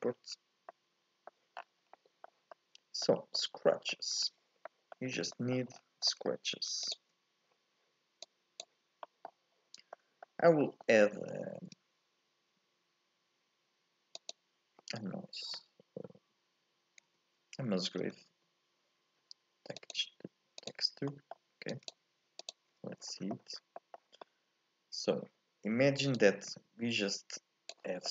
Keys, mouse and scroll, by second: 0.7 middle click, 1.6-2.7 scroll down 4, 2.7 middle click, 3.2 scroll up 2, 3.4 middle click, 4.3-4.7 scroll down 1, 4.7-6.9 middle drag, 6.9 ctrl+shift+click, 24.2 middle click, 25.2-26.2 scroll up 1, 26.2-28.1 drag.